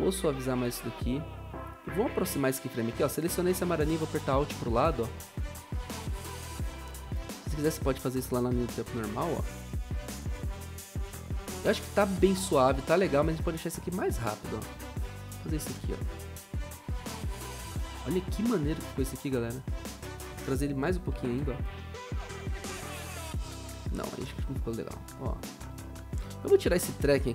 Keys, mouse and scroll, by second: 3.9 alt+Left, 4.2 alt+Left, 4.4 alt+Left, 4.6 alt+Left, 9.1 0, 15.8 0, 20.7 alt+Left, 20.9 alt+Left, 21.1 alt+Left, 21.4 0, 24.1 ctrl+z, 25.1 0.